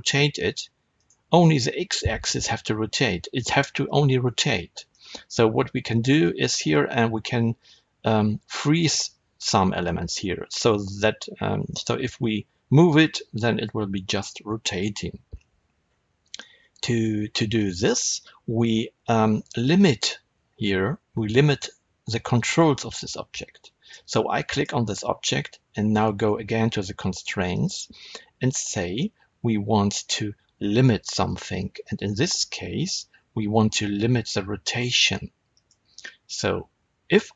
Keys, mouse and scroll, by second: 1.0 right click, 4.8-24.4 middle drag, 24.4 click, 27.4-37.3 drag.